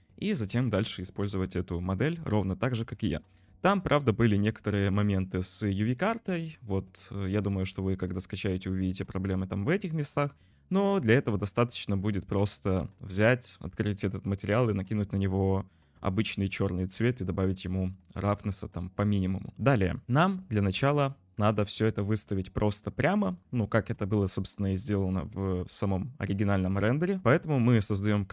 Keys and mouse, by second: 2.5-2.8 middle drag, 3.1 shift+middle drag, 4.0 shift+middle click, 5.5 middle click, 7.4-8.3 shift+middle drag, 23.1 shift+middle drag.